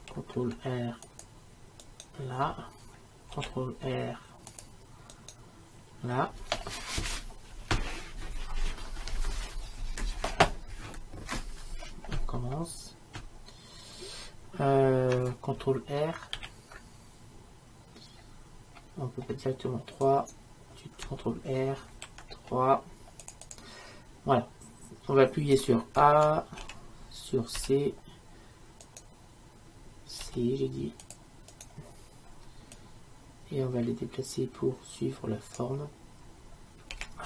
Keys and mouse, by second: 0.0 ctrl+r, 3.4 ctrl+r, 16.4 ctrl+r, 20.3-22.3 right drag, 22.0 ctrl+r, 26.7 a, 27.6 c, 30.3 c, 31.7-33.5 right drag, 33.5-36.9 drag, 37.0 a.